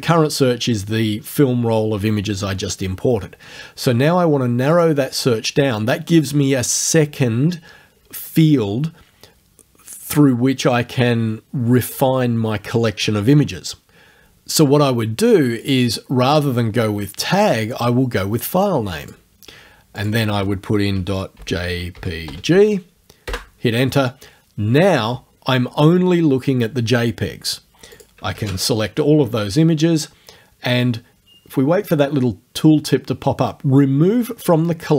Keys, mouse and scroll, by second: 4.8 click, 15.7 click, 19.1 click, 20.0 click, 21.1 ., 21.4 j, 22.0 p, 22.3 g, 23.3 Return, 28.0 click, 28.4 ctrl+a.